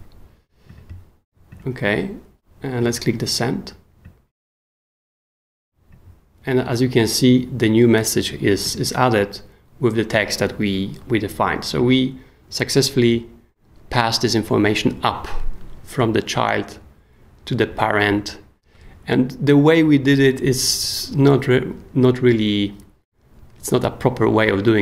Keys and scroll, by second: 0.0-0.1 typing.